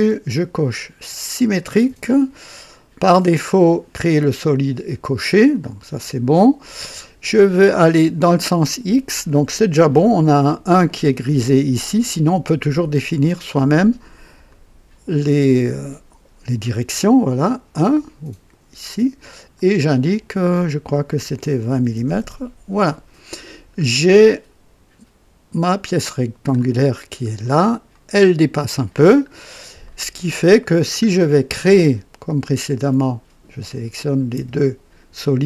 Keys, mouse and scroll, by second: 1.3 click, 3.0 click, 5.4 click, 12.7 click, 13.4 click, 14.5 click, 19.5 click, 21.7 KP_2, 21.9 KP_0, 22.0 KP_0, 22.2 KP_Enter, 23.5-23.8 scroll down 2, 24.1-26.7 drag, 26.9 scroll up 1, 27.4 right click, 28.2 scroll up 1, 29.3 scroll down 1, 29.8 right click, 30.7 scroll down 1, 32.5 click, 35.2 ctrl+click.